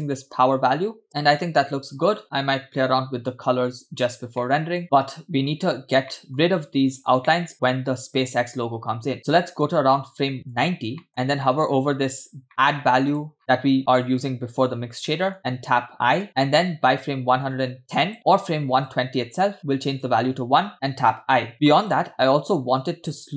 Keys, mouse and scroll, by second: 0.1-1.1 drag, 1.1 space, 2.2 space, 3.9-4.4 scroll down 2, 4.4 middle click, 4.8 space, 5.2 space, 6.1 middle click, 9.2-10.6 drag, 11.1-12.5 scroll up 6, 11.5 middle click, 12.5 middle drag, 13.1 click, 13.4 scroll down 2, 13.5 middle click, 15.1 middle click, 16.3 i, 18.2 click, 18.2-19.0 scroll up 4, 19.0-19.6 drag, 20.0 click, 21.3 i, 21.5 scroll down 2, 21.7 middle click, 22.9 click.